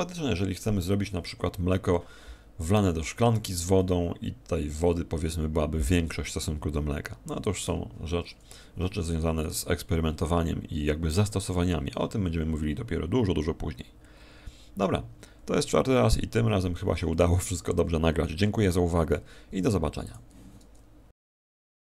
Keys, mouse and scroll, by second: 7.6 Escape.